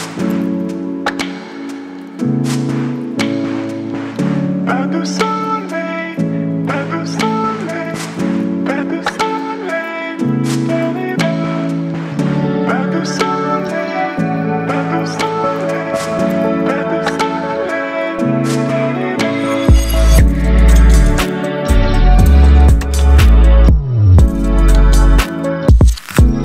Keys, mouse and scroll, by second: 0.8 click, 3.1-4.6 alt+right drag, 5.8 click, 13.8 click, 16.9-17.6 drag, 21.6-22.5 alt+right drag, 24.6 click.